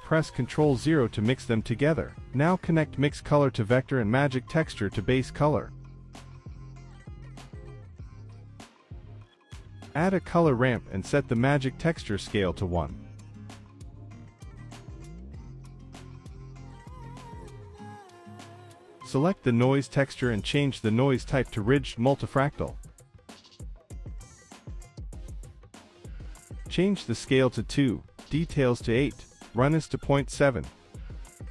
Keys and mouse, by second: 0.5 click, 1.1 shift+click, 3.0-3.8 drag, 4.1 click, 4.9 click, 5.2 click, 7.1 middle click, 8.0 middle click, 8.5-9.8 drag, 9.9-10.3 drag, 10.6 click, 10.7 drag, 11.0 click, 11.7 shift+a, 14.6 click, 15.8 click, 18.5 middle click, 20.4 middle drag, 21.8-22.9 drag, 28.0 click, 28.8 click, 29.9-31.5 drag.